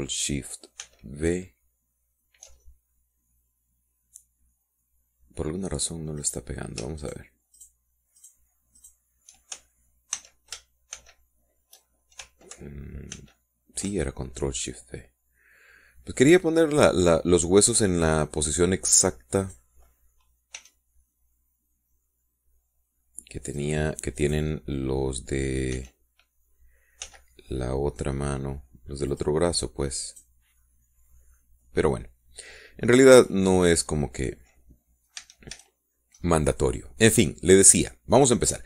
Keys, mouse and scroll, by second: 2.0 ctrl+shift+v, 3.8-7.0 ctrl+shift+drag, 7.4 click, 8.2 shift+click, 8.7 shift+click, 9.3 shift+click, 10.0 shift+click, 11.3 ctrl+c, 12.1 ctrl+shift+v, 14.3 ctrl+alt+v, 15.5-18.6 drag, 20.6 right click, 21.7 r, 24.7 click, 25.3 right click, 26.9 r, 28.2 z, 30.3 click, 31.2 click, 33.0 click, 33.1-35.8 middle drag, 35.8 right click, 36.4 a, 37.5 scroll up 1, 37.9 scroll down 1.